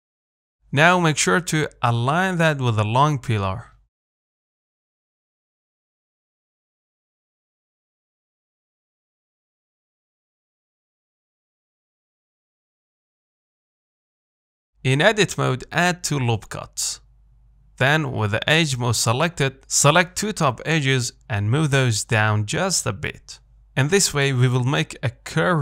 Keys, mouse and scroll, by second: 0.2-1.4 shift+middle drag, 1.4 g, 4.2 z, 4.3 middle click, 4.9 Tab, 5.0-5.5 scroll down 3, 5.5 middle click, 5.8-6.1 scroll down 1, 6.1-7.2 shift+middle drag, 7.2-7.6 scroll up 1, 7.6-9.7 shift+middle drag, 9.7-10.0 scroll up 2, 10.0 shift+middle click, 10.6-11.0 scroll up 2, 11.0-14.1 shift+middle drag, 14.1-14.5 scroll up 2, 14.5 shift+middle click, 15.1 Tab, 15.8 ctrl+r, 18.1-19.7 scroll down 1, 19.7 click, 20.4 shift+click, 21.1 g, 23.6-23.9 scroll down 2, 23.9 middle click, 24.3-25.2 scroll up 2, 25.2-25.6 middle drag.